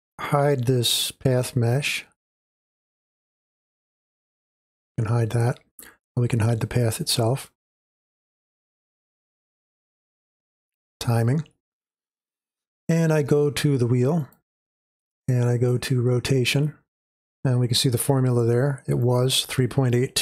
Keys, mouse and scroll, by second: 0.0-6.0 drag, 7.4-13.5 drag, 14.2-20.2 drag.